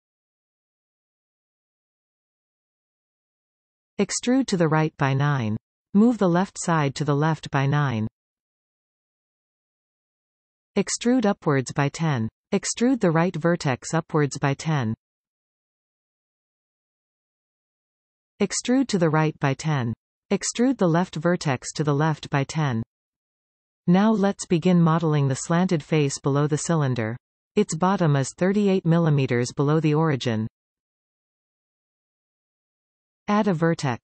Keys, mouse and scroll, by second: 0.3-1.5 scroll down 8, 1.5-3.7 shift+middle drag, 3.7 e, 5.8 click, 7.3 g, 11.5 e, 14.3 click, 15.1 e, 18.0 e, 20.6-21.8 drag, 21.8 e, 26.2-26.7 scroll down 1, 26.7-32.0 shift+middle drag, 32.0 shift+a.